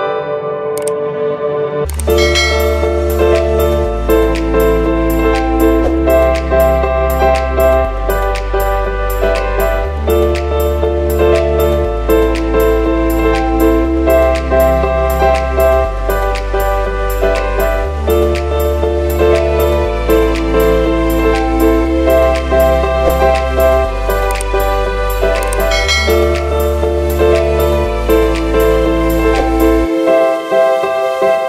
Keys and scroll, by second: 0.4 ctrl+z, 1.1 space, 2.0 space, 2.3 ctrl+z, 3.2-7.6 typing, 9.4 space, 10.6 space, 11.7-14.9 typing, 16.2 space, 17.3 space, 17.9 space, 18.5 ctrl+z, 19.4 ctrl+z, 19.8 ctrl+z, 20.6-26.3 typing, 27.6 space, 28.6 space, 29.2 space, 29.9 ctrl+z, 30.7 ctrl+z.